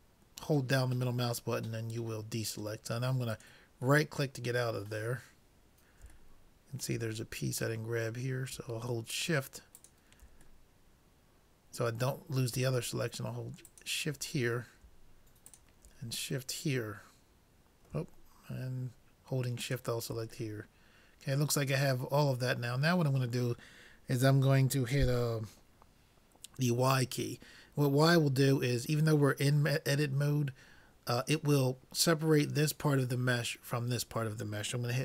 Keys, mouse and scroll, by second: 4.2-5.9 middle drag, 6.4-8.3 middle drag, 8.3-9.1 scroll up 1, 10.0-11.7 drag, 10.8-12.5 middle drag, 13.7-15.3 drag, 15.6 click, 16.5-18.3 middle drag, 19.7-21.4 drag, 20.5-22.4 middle drag.